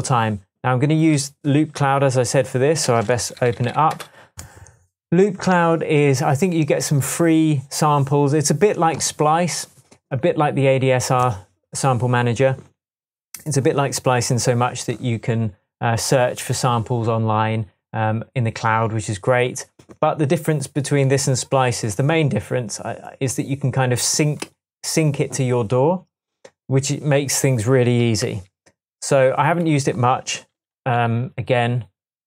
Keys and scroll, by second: 3.3-4.2 typing, 28.3 super+s, 31.0 shift+super+t, 32.1 typing.